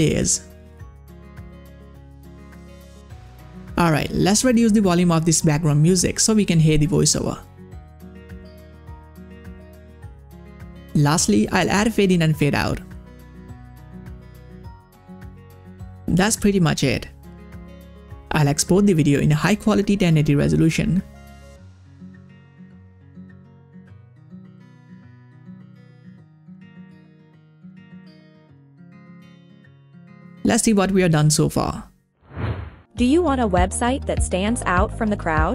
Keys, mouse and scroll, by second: 2.4-10.3 drag, 10.9 click, 11.9 click, 11.9-15.4 drag, 15.9 click, 17.4 scroll up 1, 19.2-21.3 scroll up 1, 31.8 click, 32.1 click.